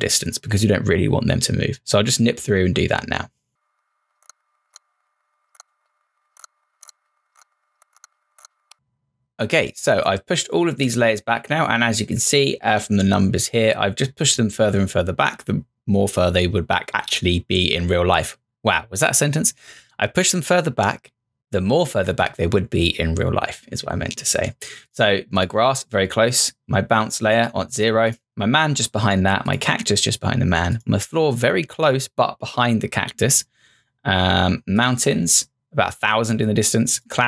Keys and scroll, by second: 4.2-8.8 typing, 4.2 Return, 4.7 Return, 5.6 Return, 7.4 Return.